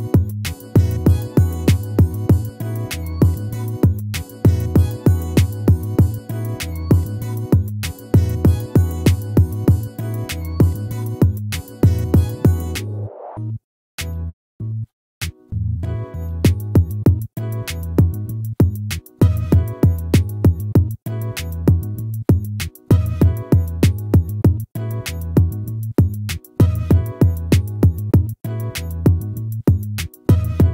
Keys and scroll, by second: 3.9 ctrl++, 14.7 ctrl+-, 16.7 ctrl+-.